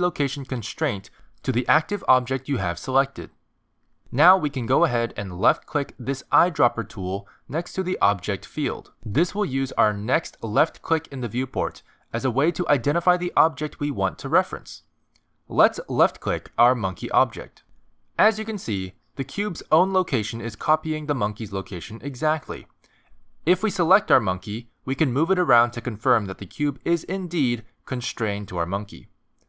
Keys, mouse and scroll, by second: 8.7 click, 23.0 click, 24.6 click, 25.7 g, 28.4 s, 29.1 r.